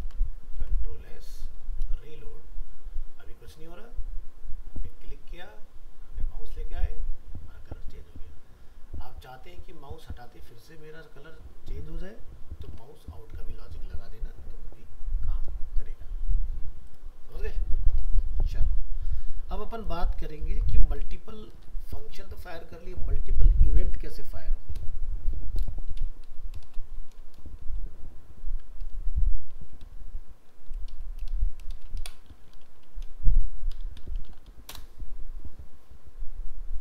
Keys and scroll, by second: 0.0 ctrl+s, 0.6 alt+Tab, 12.7 alt+Tab, 20.5 ctrl+s, 21.4 alt+f, 21.5 alt+移.